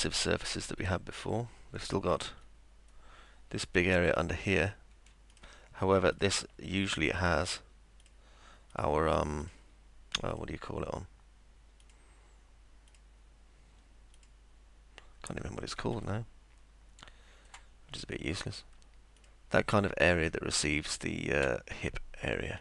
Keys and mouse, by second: 0.0-2.3 alt+middle drag, 5.3 ctrl+click, 6.1 ctrl+click, 7.2 ctrl+click, 8.0 ctrl+click, 8.7 ctrl+click, 9.4 ctrl+click, 10.3 ctrl+click, 11.8 ctrl+click, 12.9 ctrl+click, 14.1 ctrl+click, 16.1-17.4 alt+middle drag, 19.2 ctrl+click, 20.3-22.4 alt+middle drag.